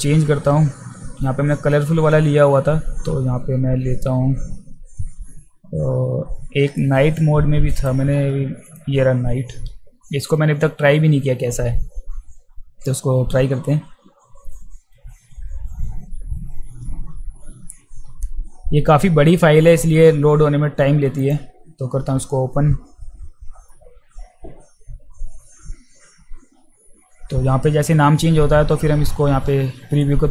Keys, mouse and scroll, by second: 7.2-7.9 drag, 8.7 click, 21.2 click.